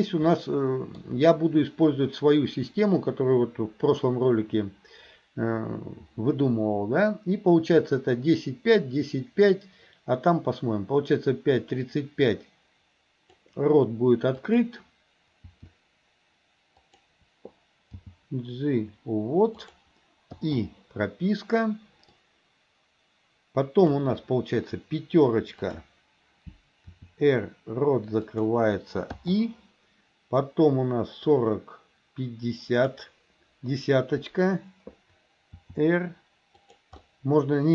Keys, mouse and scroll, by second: 0.4 middle click, 11.7-13.6 drag, 14.4 click, 15.4 r, 17.9 g, 20.4 i, 22.3-24.1 drag, 25.7 click, 27.0 r, 29.3 i, 31.4-33.1 drag, 35.6 r, 37.1-37.7 middle drag, 37.1 scroll down 2.